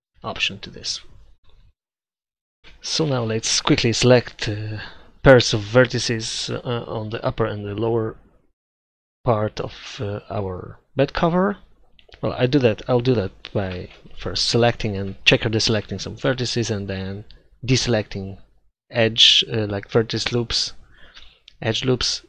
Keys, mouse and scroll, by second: 1.7 middle click, 3.4 click, 4.0 ctrl+z, 4.1 ctrl+z, 5.5-7.9 right drag, 7.9 middle click, 8.6 right click, 9.2 middle click, 10.1-11.3 right drag, 11.3 middle click, 13.2 right click, 13.7 right click, 14.5 click, 14.5 right click, 15.0 KP_7, 15.4 KP_5, 15.5 z, 16.6-17.9 right drag, 17.9 click, 18.0-19.6 right drag, 20.0-21.8 drag, 21.8 right click.